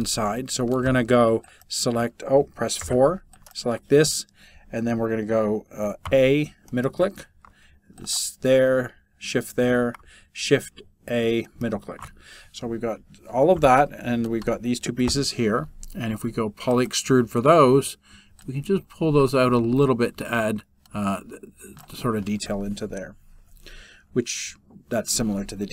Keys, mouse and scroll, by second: 6.0 shift+a, 6.3-7.6 middle drag, 9.2 shift+a, 9.5-10.9 middle drag.